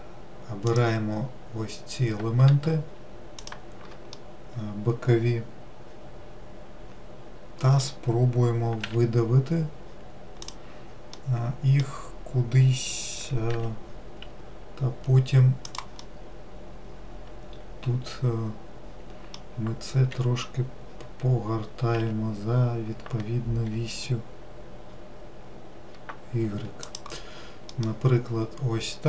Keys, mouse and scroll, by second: 0.8 click, 3.5 shift+click, 4.3-7.3 middle drag, 11.3-13.7 middle drag, 13.7 g, 16.2-19.2 middle drag, 20.2 r, 27.9-29.0 middle drag.